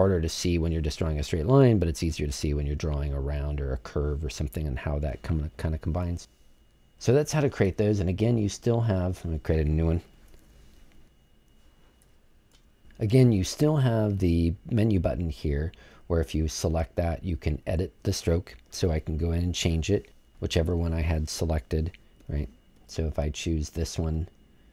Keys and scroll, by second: 10.3 super+z.